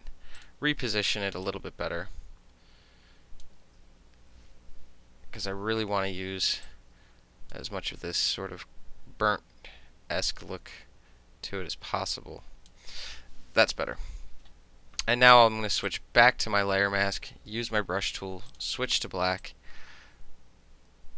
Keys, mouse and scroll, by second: 0.4 click, 1.5-3.5 drag, 5.6 ctrl+t, 6.7 click, 8.2-12.7 drag, 12.7-14.6 middle drag, 13.7 KP_Enter, 15.9 click, 17.6 b, 18.5 click, 19.5-21.1 drag.